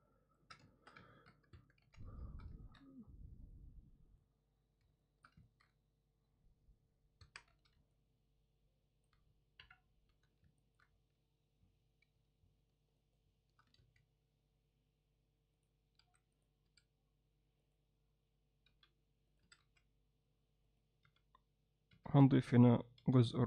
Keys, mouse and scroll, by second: 0.1 ctrl+middle click, 0.7 alt+shift+middle click, 1.1 ctrl+alt+middle click, 1.6 Tab, 1.9 z, 2.2 alt+shift+middle click, 2.6 ctrl+alt+middle click, 3.5-4.6 drag, 5.0 alt+shift+middle click, 5.5 ctrl+middle click, 7.3 Tab, 7.5 z, 7.9-9.1 alt+middle drag, 9.6 KP_1, 10.1 z, 10.6 ctrl+alt+middle click, 13.1 shift+right click, 13.8 shift+a, 16.0 s, 16.7 s, 18.7 g, 19.4 s, 21.1 t.